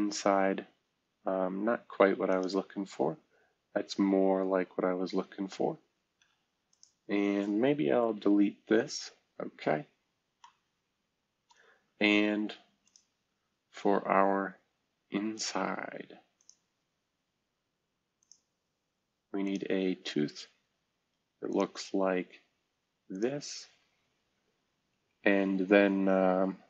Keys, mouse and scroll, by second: 0.4-1.4 scroll down 2, 1.4-2.4 scroll up 2, 3.1-4.0 scroll down 1, 3.9 F2, 4.9 Escape, 6.1 F2, 6.6 click, 6.9-7.7 drag, 8.0 Delete, 8.9-9.4 scroll down 1, 9.4-10.4 scroll up 1, 10.5 middle click, 10.5-11.2 scroll up 1, 12.8 click, 13.4-14.0 scroll down 1, 14.0-14.7 scroll up 1, 14.7-15.5 scroll up 1, 21.4 middle click, 23.1 middle click, 25.0 Escape.